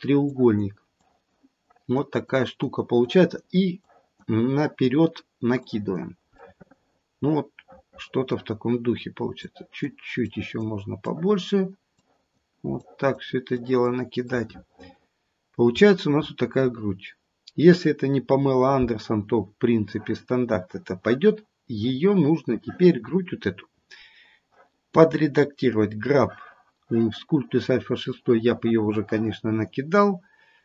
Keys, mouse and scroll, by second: 0.2 click, 0.9 click, 1.5 click, 2.2 click, 3.0 click, 3.8 click, 4.5 click, 5.6 click, 6.4 middle click, 7.7 middle click, 9.4 click, 10.2 click, 11.1 click, 11.9 click, 12.7 click, 13.4 click, 14.3 middle click, 15.7-17.3 scroll down 7, 17.3-17.9 scroll up 2, 17.9-19.8 scroll up 2, 25.8 click.